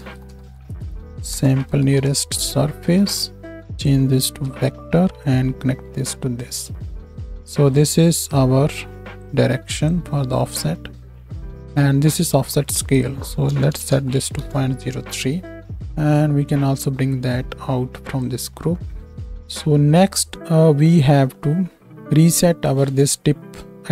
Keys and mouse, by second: 3.7-7.8 drag, 3.7-7.8 middle drag.